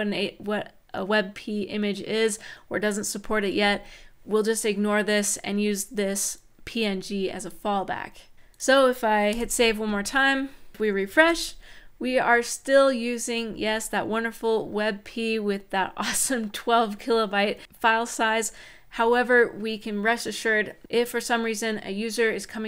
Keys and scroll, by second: 9.1 super+s, 11.0 shift+super+r.